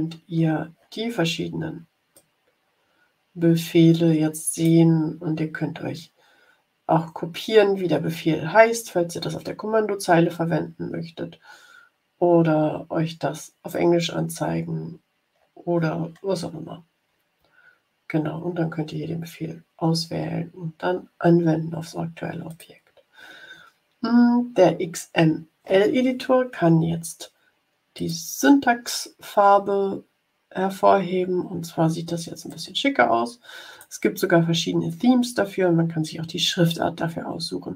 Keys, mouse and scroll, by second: 2.1-4.8 drag, 11.1-11.7 scroll down 2, 14.9-15.9 scroll down 6, 16.4 scroll down 2, 17.0 scroll up 2, 22.4 click, 27.9 click, 32.4-33.9 drag.